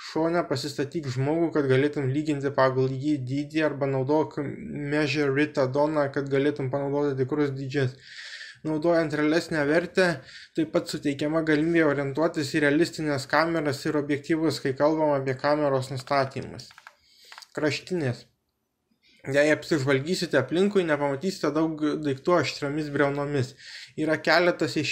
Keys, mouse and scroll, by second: 0.2 right click, 0.4 shift+a, 3.6 middle click, 5.2 g, 5.6 x, 6.7 click, 7.3 g, 9.2 y, 11.1 click, 11.7 g, 12.1 z, 17.1 s, 17.5 z, 21.1-23.5 middle drag.